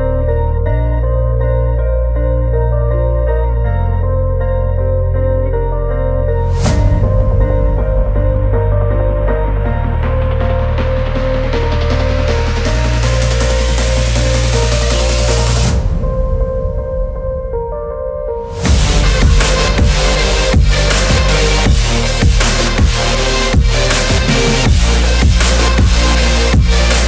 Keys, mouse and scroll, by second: 4.5 3, 4.8 middle click, 5.5 click, 6.0 middle click, 7.0 click, 8.3 g, 10.7 g, 14.4 g, 17.6 shift+middle click, 18.8 Tab, 19.1 middle click, 20.3 shift+a, 23.6 Tab, 24.5 ctrl+r, 26.5-27.0 drag.